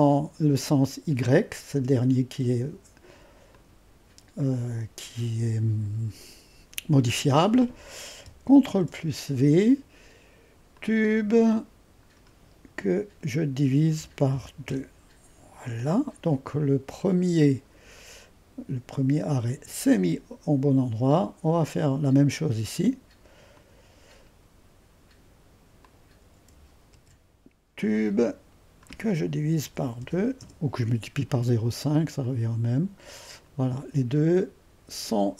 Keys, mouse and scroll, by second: 8.7 ctrl+v, 10.7-12.4 drag, 13.9-14.8 typing, 17.4-20.5 drag, 21.6-26.5 drag, 26.9 ctrl+v, 28.2-29.6 drag, 29.6-30.5 typing, 32.2-33.8 drag.